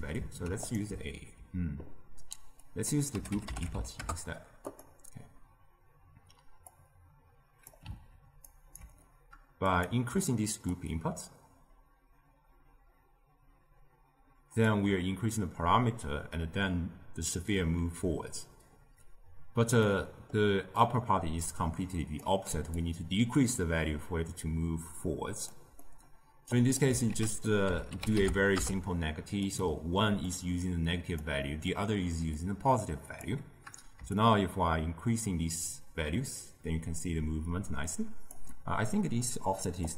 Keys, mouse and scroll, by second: 2.5 click, 6.6-8.4 drag, 8.4 ctrl+right click, 9.7 drag, 10.9-13.8 shift+drag, 19.8-20.7 middle drag, 20.7 click, 22.7-25.7 shift+drag, 25.8-26.5 middle drag, 26.5 click, 27.0 ctrl+a, 30.3-31.4 drag, 31.4-32.3 middle drag, 32.3-37.2 drag, 38.9-39.8 middle drag, 39.8 click.